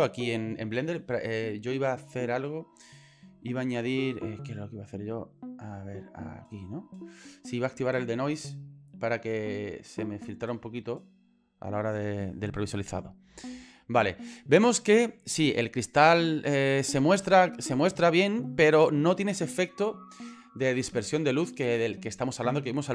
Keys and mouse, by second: 0.2 middle click, 6.4 click, 7.6 click, 8.6 click, 9.5-11.7 drag, 16.6 click, 17.5 click.